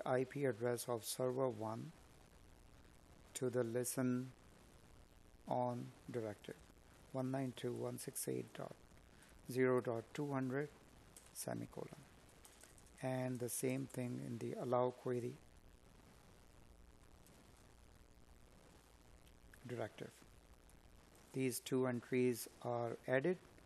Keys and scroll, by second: 3.8 space, 9.3 Escape.